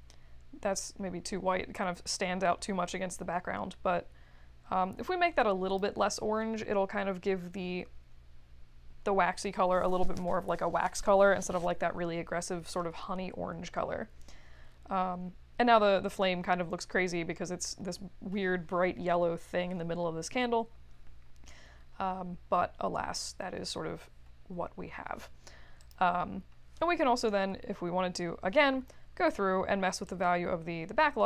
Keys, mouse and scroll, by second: 25.8 click, 30.0-31.2 drag.